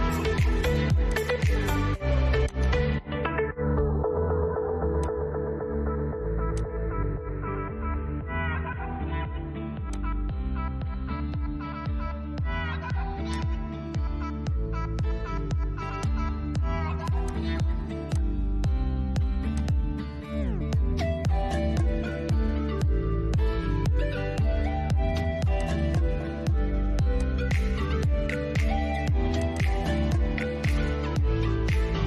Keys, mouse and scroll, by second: 0.3 click, 4.2 click, 7.9-8.4 scroll up 1, 9.1 click, 9.7 scroll down 1, 11.1 middle click, 11.5 scroll down 1, 12.6-15.2 drag, 19.5 scroll down 1, 20.3-24.8 shift+middle drag, 24.8 click, 28.7 click, 30.1 scroll down 1.